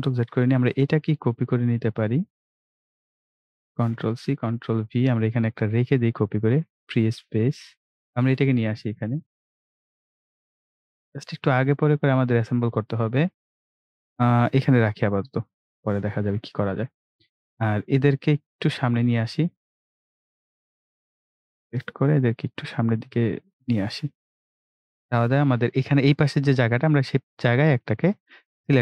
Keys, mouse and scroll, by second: 0.9-3.9 drag, 3.9 ctrl+c, 4.2 ctrl+v, 16.2 click, 17.1-17.8 scroll up 1, 19.5-25.3 drag, 26.6 scroll down 1, 27.3-28.8 drag.